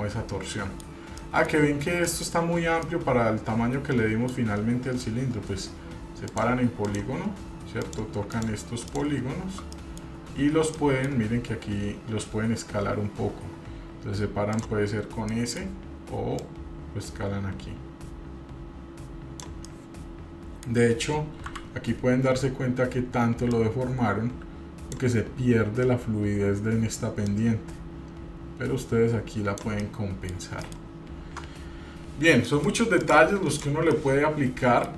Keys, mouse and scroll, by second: 0.0-1.0 middle drag, 1.3 middle click, 1.3 scroll up 1, 2.2 middle click, 3.0-4.5 middle drag, 6.5 click, 7.0 click, 8.0 click, 8.5-9.8 shift+drag, 9.9 middle click, 10.3 scroll down 1, 10.9 middle click, 14.7 click, 15.4 middle click, 16.6-19.6 drag, 19.8-20.9 middle drag, 20.9 scroll down 1, 21.6 KP_3, 22.6 scroll up 2, 23.7-25.1 drag, 27.4-29.8 drag, 30.0 middle click, 30.5-30.8 scroll down 1, 30.8 middle click, 31.1-31.5 scroll down 1, 31.5 Tab, 32.7 middle click, 32.7 scroll down 2, 33.2 drag, 33.7 click, 34.1-34.9 middle drag.